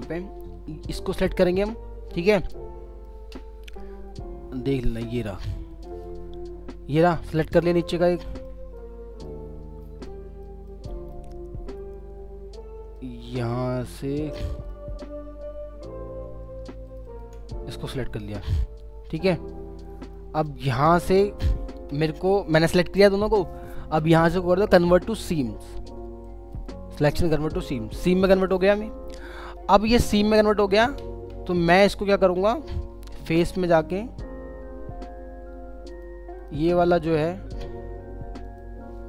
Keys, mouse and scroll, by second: 1.2 double click, 1.8 scroll down 1, 2.3 alt+middle click, 3.4 scroll up 1, 5.9 double click, 6.2 scroll down 1, 7.3 alt+middle click, 7.8-8.2 alt+scroll down 2, 8.3 middle click, 8.6 alt+scroll up 1, 8.8 alt+middle click, 9.2-9.8 alt+scroll up 2, 9.8 middle click, 10.9 alt+middle click, 11.4 scroll up 1, 13.0 alt+middle click, 14.1 scroll down 1, 14.5 middle click, 15.0 scroll up 1, 16.9 ctrl+click, 17.4 scroll down 1, 18.4 alt+middle click, 19.5 alt+scroll up 2, 19.9 alt+middle click, 20.9 scroll down 1, 21.2 alt+middle click, 21.7 alt+scroll up 1, 29.8 scroll down 1, 36.6 double click.